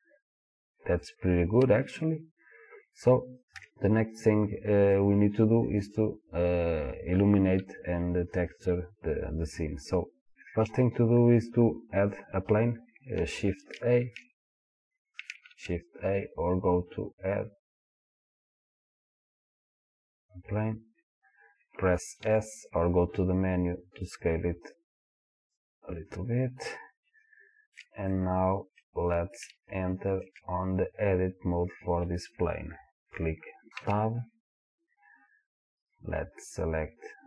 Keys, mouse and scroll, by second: 3.6 KP_1, 10.7-13.6 drag, 13.6 shift+a, 17.2-25.6 drag, 22.3 s, 26.4-27.3 scroll down 2, 27.3-35.8 shift+middle drag, 29.1 scroll up 1, 33.8 Tab, 35.8 click, 37.1 click.